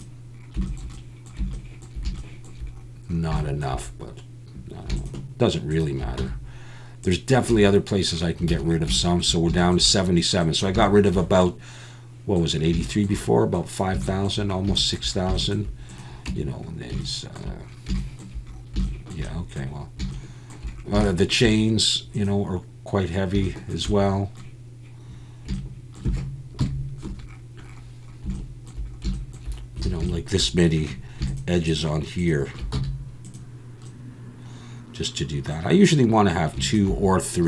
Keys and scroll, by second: 6.2 x, 7.5 Tab, 8.5 alt+a, 16.3 Tab, 26.6 KP_Decimal, 29.9 alt+a, 32.7 x.